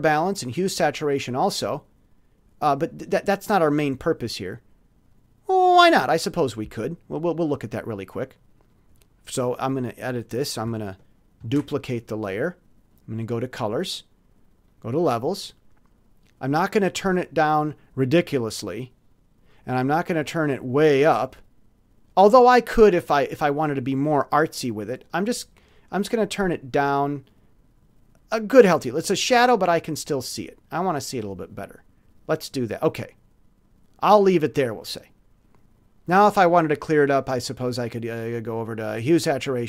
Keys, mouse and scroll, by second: 1.3 click, 7.6 click, 8.6 click, 11.4 ctrl+shift+d, 12.9 click, 14.6 click, 16.8-29.0 drag, 30.8-32.0 drag, 34.8 click, 37.3 click, 38.9 click.